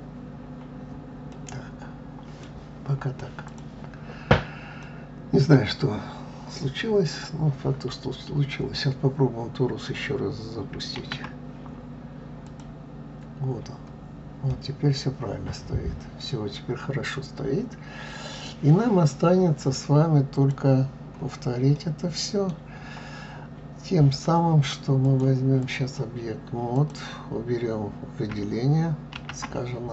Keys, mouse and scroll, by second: 0.4 scroll down 3, 1.3-3.5 middle drag, 3.5 click, 4.8-7.9 middle drag, 11.0 shift+a, 14.5-17.6 middle drag, 19.1-20.4 middle drag, 20.4 click, 21.8-24.8 middle drag, 25.0-26.9 drag, 29.2 shift+a.